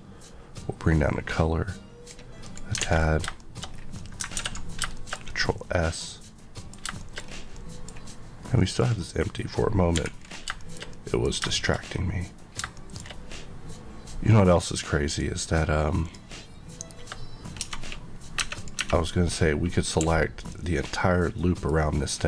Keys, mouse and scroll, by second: 2.4 click, 2.8 alt+a, 3.0-3.3 alt+scroll down 2, 3.3 shift+middle click, 3.6-3.9 scroll, 3.9 middle click, 4.3 ctrl+s, 4.9 shift+middle click, 7.2-7.5 scroll up 1, 7.5 middle click, 8.8 click, 9.9 click, 9.9 h, 10.1 scroll down 1, 10.6 shift+middle click, 11.5 shift+middle click, 11.8-12.7 shift+scroll up 2, 12.7 shift+middle click, 15.0 click, 16.0 click, 17.6 Tab, 17.9 scroll up 1, 18.4 Tab, 18.5 click, 18.7 Tab, 19.9 1, 20.3 click, 20.9 middle click.